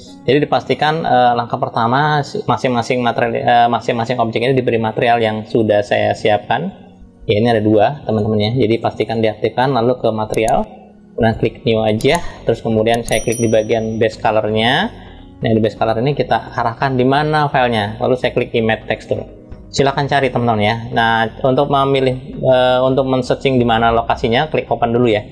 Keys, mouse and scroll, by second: 0.4 click, 7.8 click, 8.4-8.8 drag, 10.0 click, 11.0 click, 14.1-15.3 drag, 16.1-17.9 drag, 18.7 click, 25.0 click.